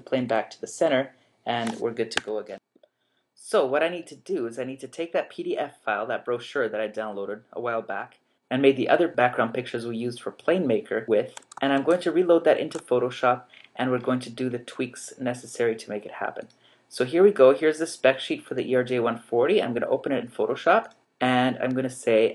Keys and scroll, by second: 2.2 Escape, 11.8 super+Tab.